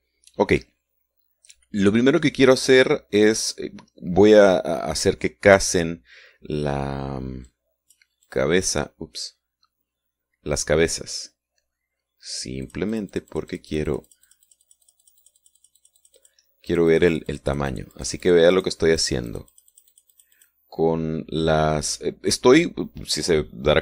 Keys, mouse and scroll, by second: 8.5 click, 13.7-17.5 drag, 17.7-19.5 drag, 19.5 click, 19.9-21.9 drag.